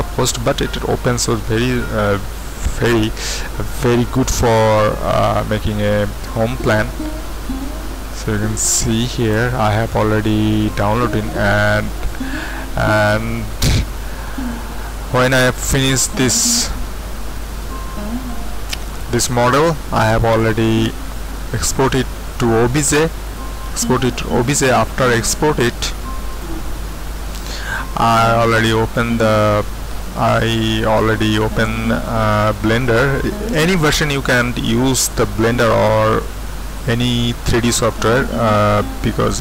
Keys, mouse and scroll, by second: 0.2 click, 1.6 click, 7.0-11.6 drag, 14.4-15.6 drag, 17.4 middle click, 18.3-21.3 drag, 26.1 click, 28.4 click.